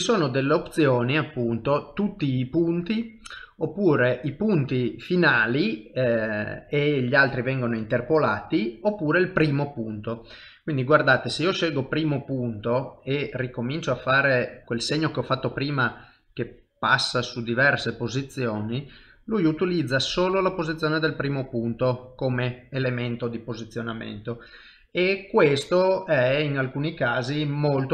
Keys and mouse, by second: 12.3 middle click, 13.5 ctrl+middle click, 14.2 shift+middle click, 14.6 middle click, 15.0 click, 18.7 middle click, 21.7 middle click.